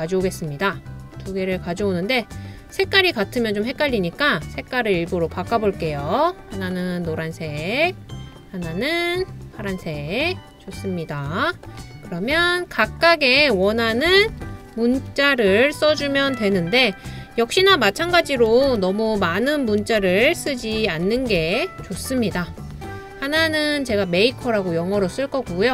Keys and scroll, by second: 3.4 typing, 11.6 typing, 14.1-15.5 typing, 18.7 m, 18.7 m, 20.0-21.9 typing.